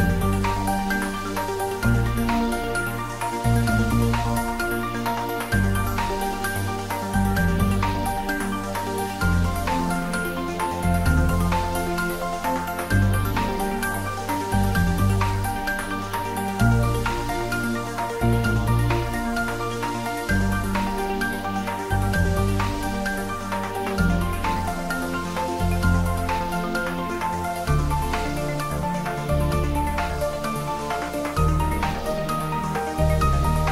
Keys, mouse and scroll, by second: 2.5 right click, 3.1-3.9 scroll down 1, 4.3-5.5 middle drag, 5.8-6.9 scroll up 1, 7.2 click, 8.1-9.5 scroll down 1, 9.5-11.7 middle drag, 13.0 click, 15.1-15.9 scroll down 1, 15.9 middle click, 17.5-18.7 drag, 19.0-19.9 drag, 23.2 shift+a, 27.4 click, 29.2 click, 29.7 shift+a, 33.0 click.